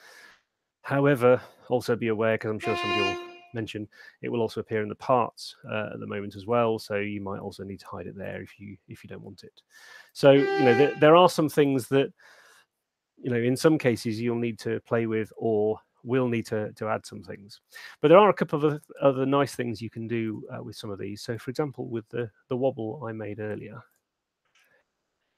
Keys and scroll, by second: 3.0 w, 10.7 w, 14.3 super+8.